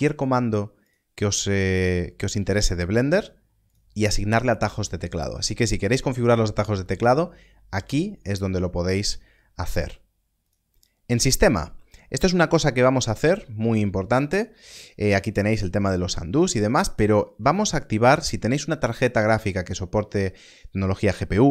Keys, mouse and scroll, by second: 0.8 click, 1.9-2.4 scroll down 1, 2.4-3.6 scroll up 1, 3.6 click, 8.0 click, 10.3 scroll up 1, 10.4 click.